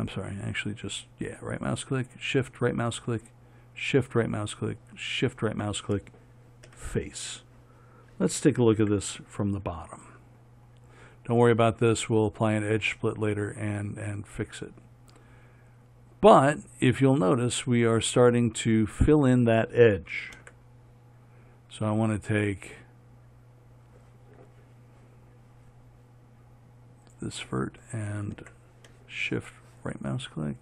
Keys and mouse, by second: 7.1 f, 9.1 ctrl+KP_7, 18.0 click, 20.7 ctrl+KP_7, 27.4-30.6 drag.